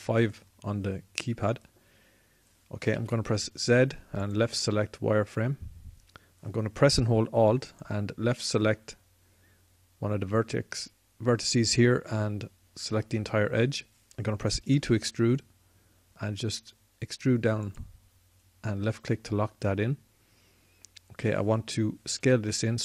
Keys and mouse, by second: 3.3 z, 4.6 z, 8.1-15.1 drag, 15.1 e, 18.5-19.9 drag, 22.4 s.